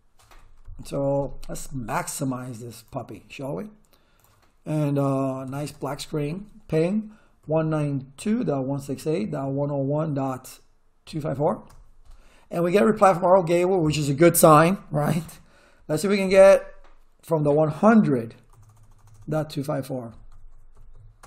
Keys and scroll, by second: 5.1-6.1 typing, 7.2-11.9 typing, 16.2 Up, 18.5 BackSpace, 19.9-21.2 typing.